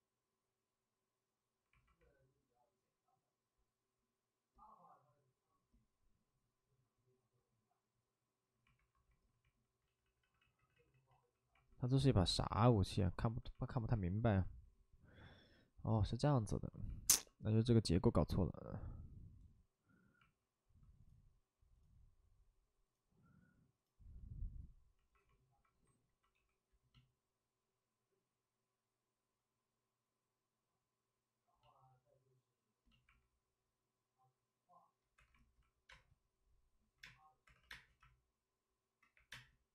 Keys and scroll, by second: 8.7 alt+s, 9.8 ctrl+z, 10.0 ctrl+z, 10.1 ctrl+z, 10.3 ctrl+z, 12.3 space, 16.9 alt+s, 17.0 alt+s, 20.2 alt+s, 20.6 alt+s, 31.8 w, 35.8 2, 35.8 space, 37.0 space, 37.4 2, 37.6 space, 39.1 3, 39.2 space.